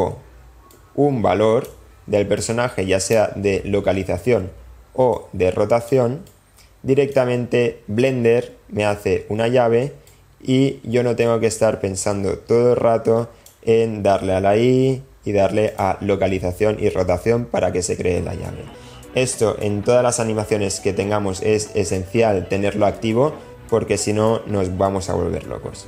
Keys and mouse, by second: 0.7-1.7 drag, 2.4 click, 5.1 click, 6.2 click, 10.1-13.5 drag.